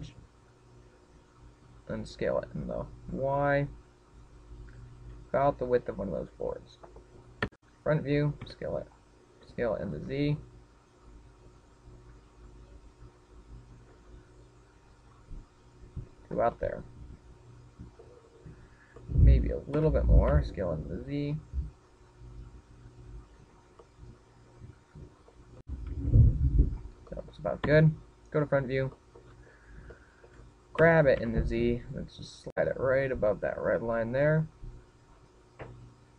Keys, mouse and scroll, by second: 2.4 click, 2.8 s, 7.0 click, 8.1 KP_1, 9.1 s, 10.1 s, 16.8 click, 17.2 middle click, 19.1-20.5 scroll up 6, 19.7 middle click, 20.5 s, 24.2 click, 24.5 middle click, 26.3 s, 27.4 click, 27.8 middle click, 28.3 KP_1, 28.6-29.2 scroll down 3, 29.7 shift+middle click, 30.2-30.6 scroll up 6, 30.6 shift+middle click, 31.5 g.